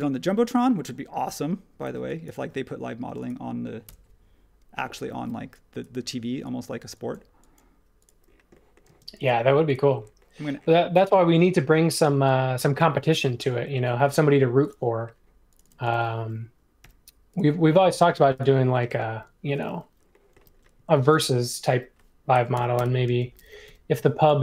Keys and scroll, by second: 1.8 e, 3.0 space, 3.8 BackSpace, 5.1 e, 8.8 space, 16.8 |, 18.9 space, 20.3 m, 22.3-23.6 typing.